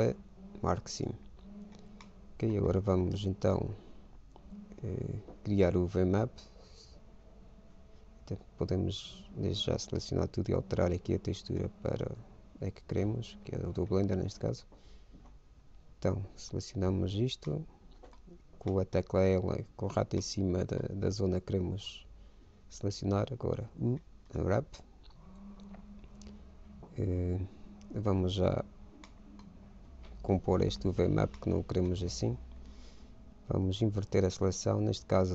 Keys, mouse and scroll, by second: 2.3 middle click, 3.1 ctrl+Tab, 4.8-6.4 middle drag, 8.8 a, 10.7-12.4 drag, 15.4 a, 17.2 l, 17.7-23.9 middle drag, 23.9 u, 29.1-33.3 middle drag, 34.0 ctrl+i.